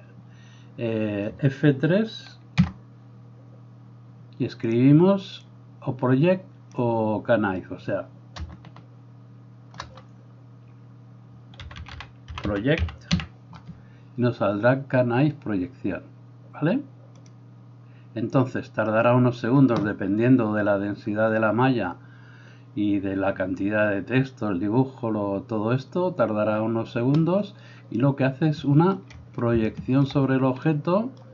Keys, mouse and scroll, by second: 0.0-31.3 drag, 2.6 F3, 9.5-12.0 middle drag, 9.5-12.0 right drag.